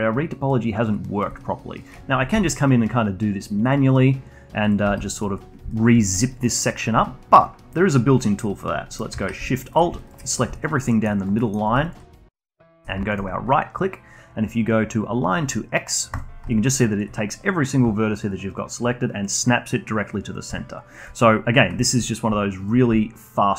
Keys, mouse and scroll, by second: 2.7 g, 5.0 click, 5.2 g, 6.1-9.3 alt+drag, 10.1 alt+shift+click, 10.4 alt+click, 10.7 scroll down 2, 11.0 alt+click, 11.2 alt+middle click, 11.5 alt+click, 11.8 alt+middle click, 12.2 alt+click, 12.9 alt+middle click, 13.1-13.5 alt+drag, 13.5-16.5 shift+right drag, 16.9-22.6 alt+drag, 22.8-23.5 alt+drag.